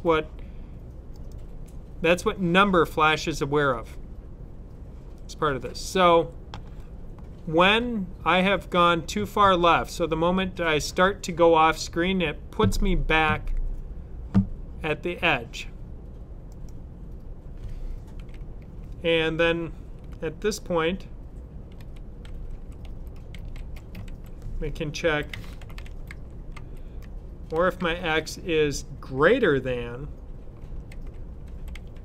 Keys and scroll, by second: 21.7 e, 22.8-27.7 typing, 30.5-32.0 typing.